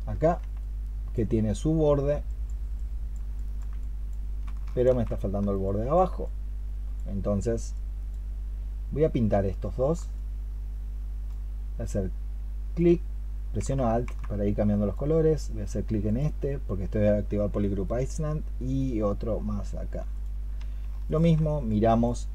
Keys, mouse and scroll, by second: 3.2 alt+click, 4.6 ctrl+shift+click, 10.0 alt+click, 20.9 ctrl+shift+click.